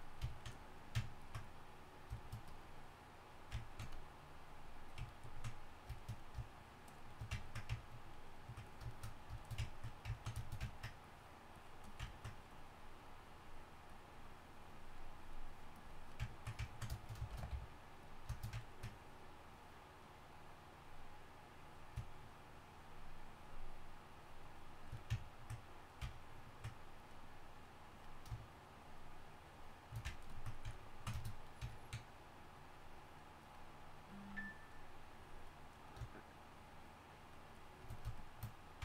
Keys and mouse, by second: 9.3 click, 10.1 click, 12.1 click, 16.2-18.0 drag, 17.3 shift+c, 17.5 f, 20.5 drag, 31.5 click, 35.8-38.8 drag.